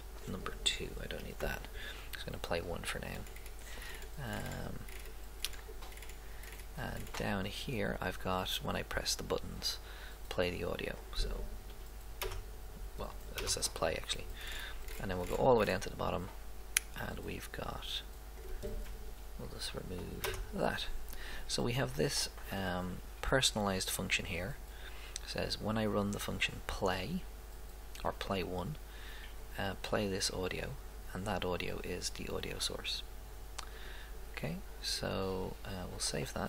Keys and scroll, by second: 1.4 BackSpace, 12.2 BackSpace, 20.2 BackSpace.